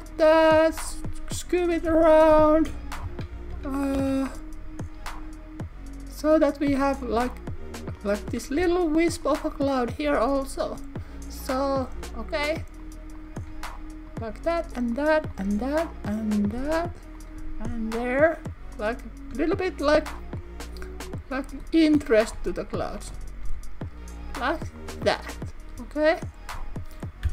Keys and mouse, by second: 0.0 click, 0.5 click, 0.8 g, 1.4 click, 2.7-4.0 typing, 8.0 click, 8.7 g, 9.3 click, 9.8 click, 10.1 g, 10.7 click, 11.5 click, 12.5 click, 12.9 click, 14.2 click, 14.9 click, 16.5 s, 17.2 click, 17.4 g, 18.0 click, 18.8 click, 19.3 g, 20.0 click, 21.9 click, 22.4 g.